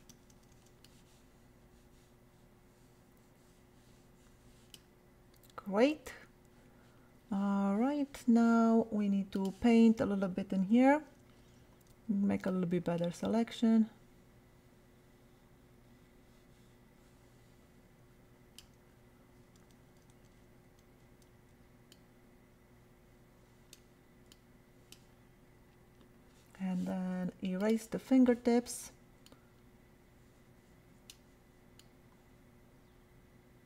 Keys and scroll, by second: 0.1 ], 10.6 [, 19.5 ], 20.1 [, 21.3 ].